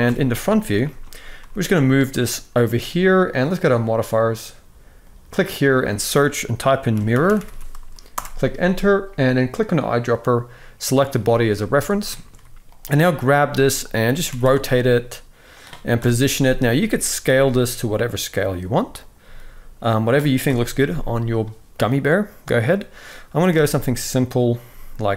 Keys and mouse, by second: 0.5 shift+middle drag, 1.1 g, 3.2 click, 4.7-7.8 drag, 7.1 r, 9.4 click, 11.2 z, 12.0-13.0 middle drag, 13.1 g, 14.0 r, 15.7 KP_7, 16.5 shift+middle drag, 17.0 g, 18.9 s, 20.2 KP_1, 24.2 r, 24.4 g.